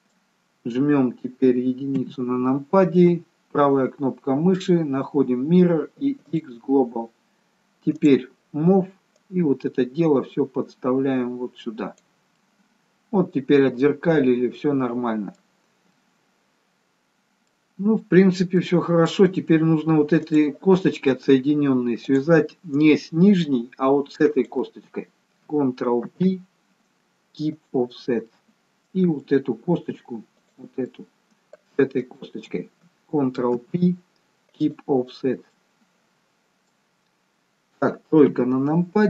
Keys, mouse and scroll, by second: 2.0 KP_1, 3.8 right click, 8.0 click, 9.2 click, 13.3 middle click, 15.8 scroll down 2, 16.0 middle click, 18.7 middle click, 19.7-20.2 scroll up 2, 20.2 click, 22.2 click, 24.4 shift+click, 24.9 shift+click, 26.2 ctrl+p, 28.4 middle click, 30.4 click, 30.8 middle click, 32.2 shift+click, 33.7 ctrl+p, 35.4 scroll down 3, 35.6 middle click, 37.3-38.4 scroll down 1, 38.4 KP_3.